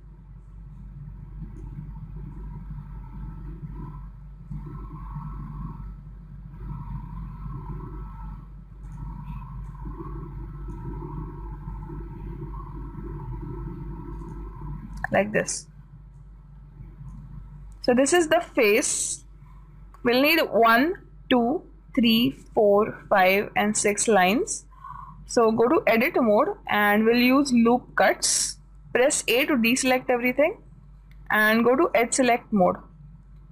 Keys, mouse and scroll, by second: 5.0 s, 10.1-12.0 drag, 12.2 s, 16.6 click, 26.2-28.4 drag, 30.2 a, 32.4-33.5 drag.